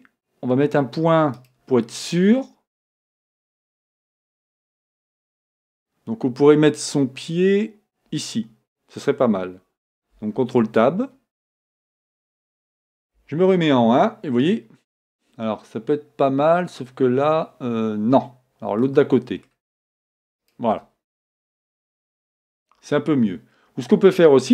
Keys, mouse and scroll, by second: 1.4-3.1 right drag, 2.0-3.8 middle drag, 3.9 middle click, 10.6 ctrl+Tab, 12.1-13.8 right drag, 13.2 KP_0, 18.9-20.7 middle drag, 20.6-22.2 right drag.